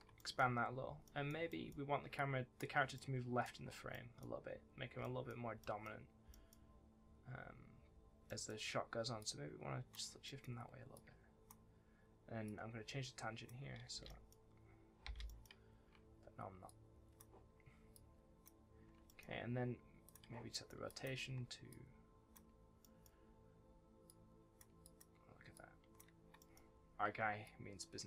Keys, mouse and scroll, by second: 0.1 middle click, 0.3-0.8 scroll up 1, 0.8 scroll down 1, 1.0 middle click, 2.1 click, 2.7 scroll down 1, 2.9 middle click, 3.6-3.9 scroll down 1, 3.9 middle click, 4.4-4.9 scroll down 1, 4.9 shift+middle click, 5.5 shift+middle click, 6.2 middle click, 6.5-6.9 scroll up 1, 8.2 middle click, 9.1 shift+click, 10.2 middle click, 10.9 click, 13.9 space, 14.0 middle click, 15.0 space, 15.2 middle click, 16.6 click, 17.9 shift+click, 19.0 middle click, 20.0 click, 20.4 middle click, 20.8 click, 21.6 shift+click, 22.7 middle click, 24.0 shift+click, 24.8 click, 25.5 shift+click, 26.3 middle click, 26.7-27.4 scroll down 1, 27.4 click.